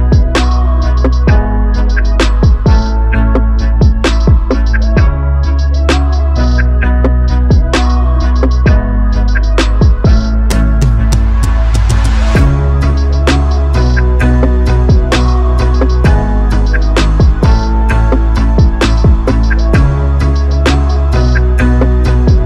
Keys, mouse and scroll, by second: 2.1 shift+s, 2.6 shift+s, 3.9 r, 19.2 shift+s, 20.1 r.